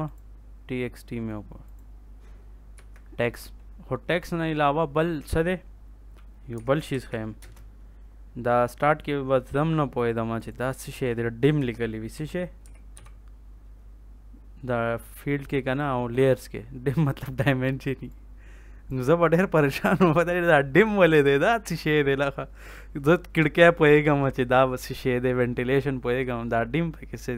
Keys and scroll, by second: 2.7 Escape, 6.5 l, 6.8 a, 7.3 space, 11.5 F2, 11.8-13.4 typing.